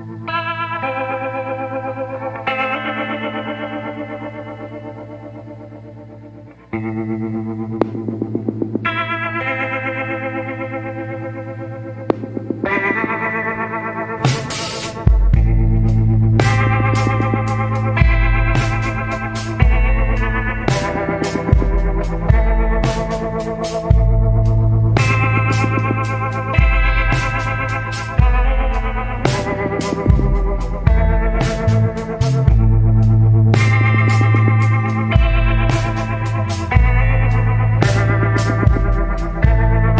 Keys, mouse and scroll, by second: 8.4 scroll down 1, 9.3 scroll up 1, 12.7 scroll down 1, 15.5 scroll up 1, 17.1 scroll down 1, 19.2 scroll up 1, 21.7 scroll up 1, 24.3 scroll down 1, 26.5 scroll up 1, 29.0 scroll down 1, 30.2 scroll up 1, 33.9 scroll down 1, 36.9 scroll down 1, 38.0 scroll up 1, 39.2 scroll down 1.